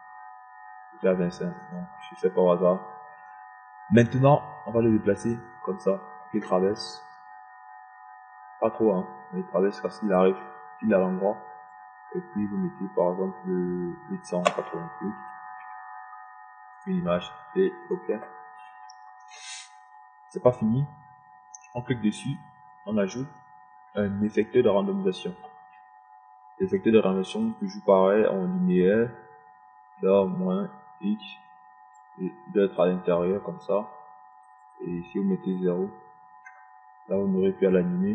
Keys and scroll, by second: 17.2 KP_8, 18.0 0.